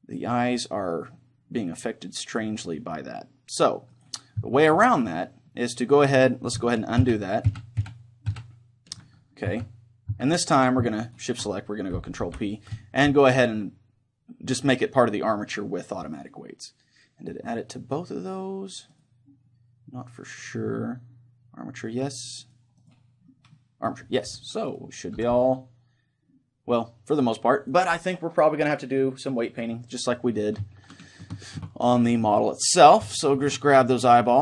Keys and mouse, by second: 4.0-5.9 right drag, 5.9-7.0 middle drag, 7.0 ctrl+z, 7.6 ctrl+z, 7.8 ctrl+z, 8.4 ctrl+z, 9.5 z, 10.1 z, 11.1-16.2 right drag, 12.2 ctrl+p, 19.0-20.9 right drag, 20.3-22.2 drag, 22.4-27.6 right drag, 25.2 r, 27.7-29.5 right drag, 29.6-31.2 right drag, 31.2-34.4 middle drag.